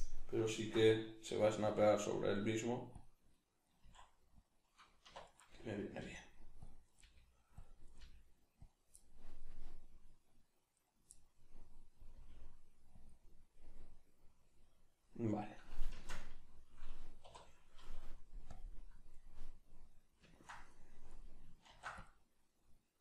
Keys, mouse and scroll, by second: 1.7 s, 3.0 click, 3.8 s, 4.6 click, 5.1 1, 5.3 right click, 6.0 g, 6.7 click, 6.9 right click, 7.0 g, 7.6 click, 7.9 right click, 8.0 g, 8.7 click, 9.0-10.8 middle drag, 10.8 right click, 11.2-18.6 middle drag, 12.2 g, 13.1 click, 16.0 shift+Tab, 17.3 3, 18.6 click, 19.2-23.0 middle drag, 21.7 ctrl+r.